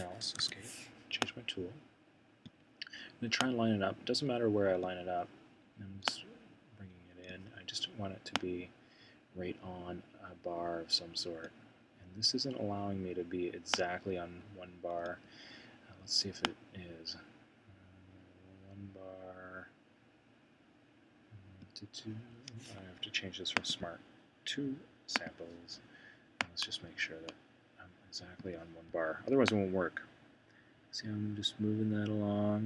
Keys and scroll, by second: 0.2 ⟲.